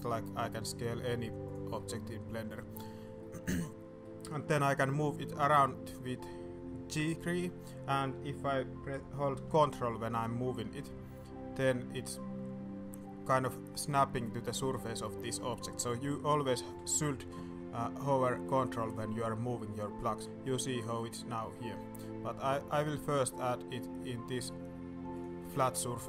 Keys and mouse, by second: 1.7-2.3 middle drag, 2.5-3.0 middle drag, 3.2-3.5 middle drag, 4.0 middle click, 6.9 g, 18.2 ctrl+middle click, 20.2 ctrl+g, 25.2 middle click, 25.6 shift+middle click.